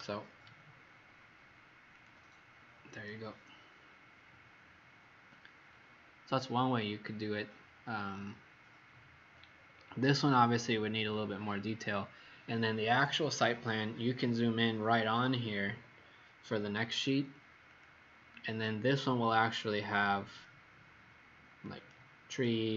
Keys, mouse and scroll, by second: 3.7-4.1 scroll up 3, 4.4-5.8 scroll up 2, 5.8-6.7 scroll down 1, 9.6-10.1 scroll down 4, 17.4 scroll down 1, 17.6 click, 22.2 click.